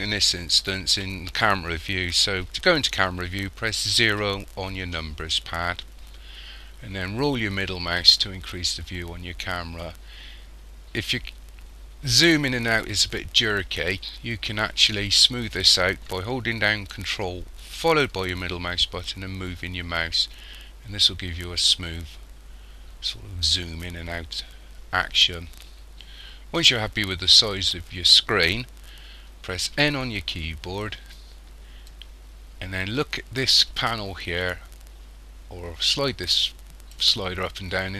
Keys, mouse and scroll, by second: 4.1 KP_0, 7.4-8.0 scroll up 2, 9.4 scroll up 1, 9.9-10.7 scroll down 3, 10.7-11.0 scroll up 3, 11.4-11.9 scroll down 3, 12.0-12.3 scroll up 3, 12.6-13.0 scroll down 3, 13.4 scroll up 2, 18.0 ctrl+middle click, 29.8 n, 31.9 click.